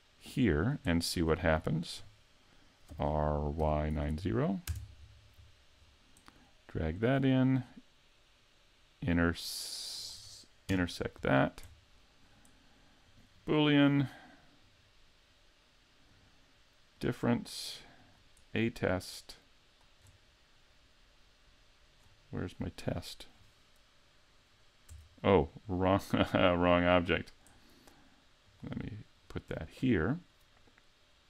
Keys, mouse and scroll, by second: 0.9 middle click, 1.3 scroll up 4, 1.7 shift+middle click, 2.9 r, 5.4-5.8 scroll down 2, 5.8 scroll up 3, 7.0 click, 10.7 KP_Decimal, 11.3-12.1 scroll down 7, 12.0 middle click, 13.1 click, 16.1 click, 18.0 click, 28.5 click, 29.2 right click.